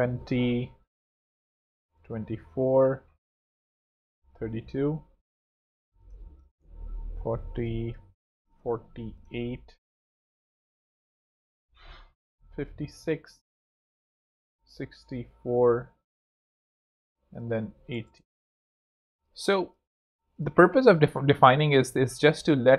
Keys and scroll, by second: 1.7 super+2, 1.9 Return, 2.2 super+Home, 4.1 super+3, 4.2 Tab, 6.1 super+4, 6.3 0, 6.4 Home, 9.2 4, 9.5 8, 10.0 Return, 12.2 super+5, 12.3 6, 12.4 Return, 14.4 super+6, 14.8 4, 15.5 Return, 17.6 super+8, 17.8 0, 17.9 Return, 18.9 alt+z, 19.3 alt+space, 20.0 space, 20.1 z.